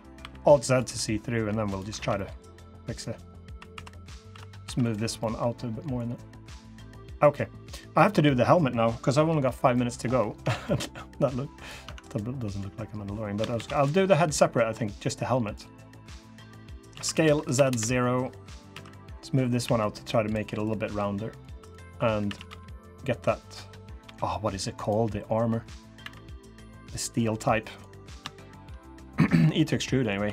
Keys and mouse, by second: 0.0 r, 0.6 g, 1.7 alt+z, 1.9 drag, 2.9 click, 3.2 3, 3.5 2, 4.1 click, 4.1 3, 4.4 3, 4.9 click, 6.3-7.4 drag, 7.8 click, 9.5-9.8 drag, 10.2 Tab, 10.4-10.7 drag, 11.6 Tab, 12.1 click, 13.3 shift+d, 14.6-16.7 drag, 16.7 s, 18.5 1, 19.4 1, 19.4 2, 21.3 3, 22.0 a, 22.2 g, 23.8 g, 25.8 e, 28.1 shift+click, 28.8 click, 29.4-29.8 drag, 30.0 2.